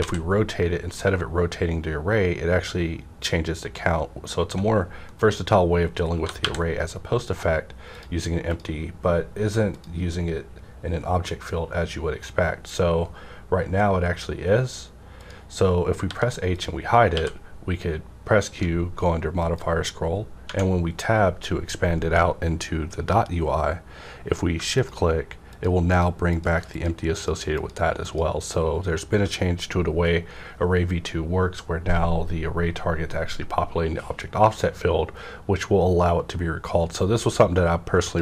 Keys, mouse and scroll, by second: 0.0 z, 5.0 right click, 5.1 right click, 5.1-6.6 typing, 7.9 click, 15.2 click, 16.0 h, 16.5 click, 17.1 q, 19.4 click, 19.4 q, 20.5 Tab, 22.1 scroll up 1, 24.6 scroll up 1, 24.7 click, 28.7 shift+click, 37.5 shift+Num_Lock, 37.5 shift+click, 38.1 shift+click.